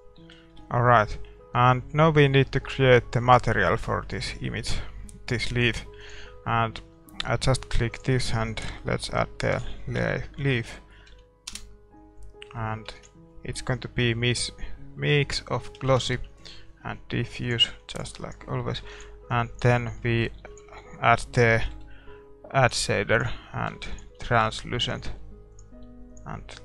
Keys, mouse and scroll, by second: 0.1-3.0 middle drag.